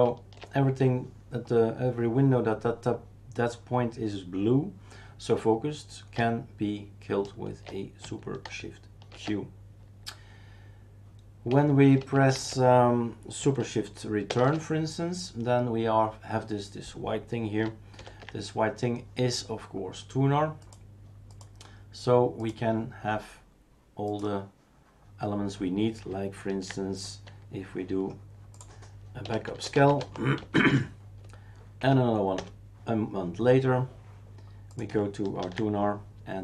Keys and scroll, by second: 9.1 shift+super+q, 12.2 shift+super+q, 12.3 shift+super+q, 14.3 shift+super+Return, 18.0 ctrl+alt+t, 29.0-30.9 typing, 31.8 Up, 32.3 Return, 35.4 ctrl+h.